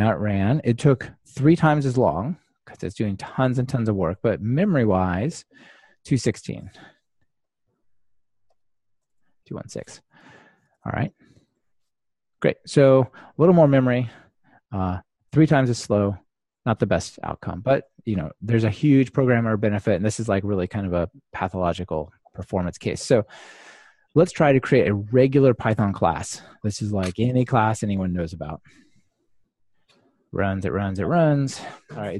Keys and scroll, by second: 13.2 super+F2, 18.5 super+/, 28.8 ctrl+r.